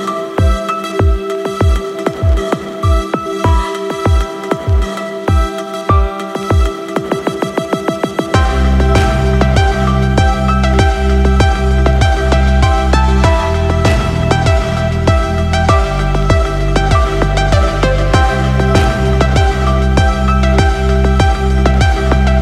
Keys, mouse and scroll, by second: 2.3 right click, 2.9-4.3 middle drag, 7.5 click, 10.0 i, 13.4 click, 16.8 click, 21.3 i.